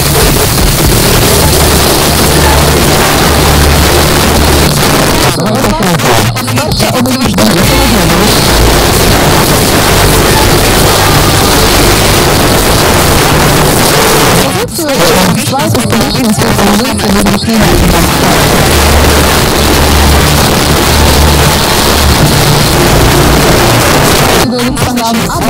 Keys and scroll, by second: 4.7 Page_Down, 13.7 Page_Down, 23.7 Page_Down.